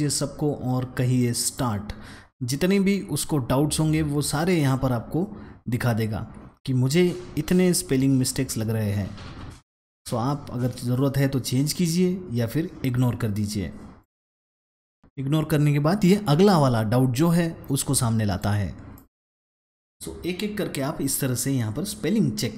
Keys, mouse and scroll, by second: 1.4 click, 8.1-8.6 scroll down 2, 8.8-10.3 scroll down 1, 10.6-12.0 scroll up 2, 13.9 click, 16.3 click, 18.2 click, 18.8 click, 19.5 click, 22.5 click.